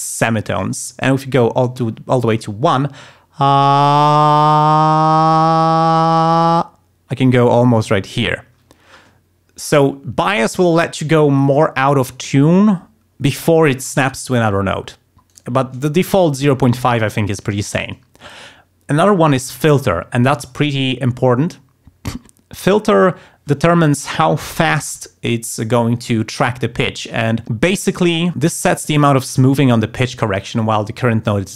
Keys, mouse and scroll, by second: 1.1 click, 15.3 right click.